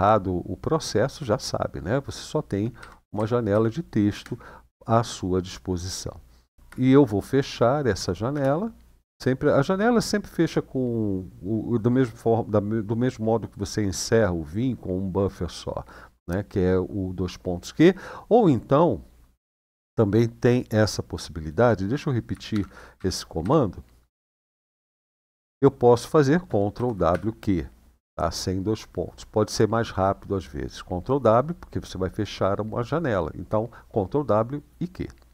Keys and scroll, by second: 2.5 Up, 2.9 Down, 3.2 Up, 3.8 Down, 6.5 shift+;, 7.7 q, 8.0 Return, 22.3 shift+;, 22.7 Up, 23.2 Up, 23.8 Return, 26.5 ctrl+w, 26.8 q.